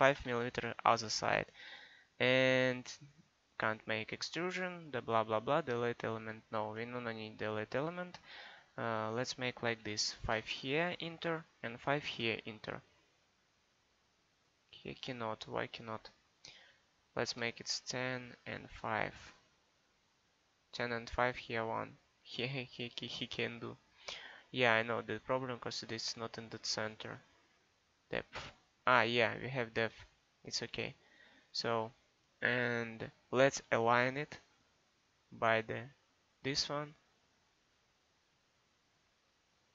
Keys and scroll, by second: 6.6 ctrl+z, 9.8 5, 10.3 Return, 12.0 5, 12.2 Return, 17.1 1, 17.3 0, 19.0 5.